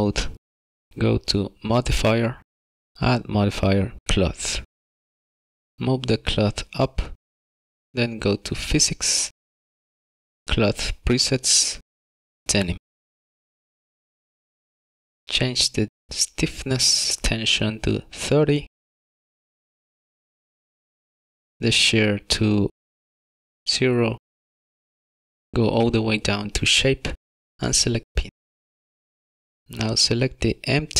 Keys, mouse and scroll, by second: 0.9 middle click, 0.9 scroll down 2, 2.0 click, 4.2 click, 7.3 click, 9.8 click, 12.7 click, 16.9 click, 19.0 click, 23.6 click, 25.4-26.0 scroll down 2, 26.0 scroll down 9, 26.2 click, 27.5 click, 29.6 middle click, 29.6-30.4 shift+scroll up 1.